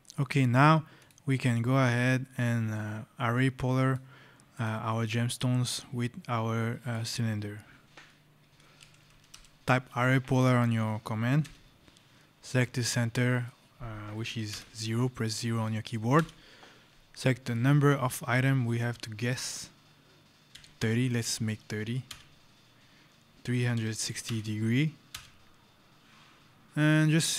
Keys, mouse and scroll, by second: 0.0-0.6 shift+scroll, 0.6 scroll, 0.8 click, 1.7 scroll, 2.3 click, 2.6 scroll, 4.4 click, 8.6 a, 11.4 Return, 14.4 KP_0, 16.0 Return, 20.4 KP_3, 20.6 KP_0, 21.9 Return, 23.6 KP_3, 23.9 KP_6, 24.2 KP_0, 25.0 Return, 26.6 scroll, 27.2 right click.